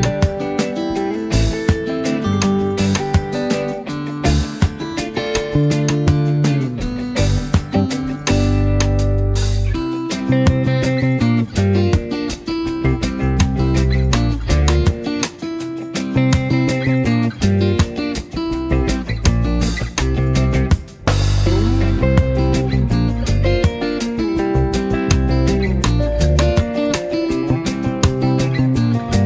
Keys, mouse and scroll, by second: 2.0 Delete, 3.1 click, 3.8 space, 4.1 click, 4.4 space, 5.2-5.8 drag, 13.2 space, 13.5-16.0 drag, 19.4 space, 19.6-23.3 drag, 28.4 space, 28.6 click.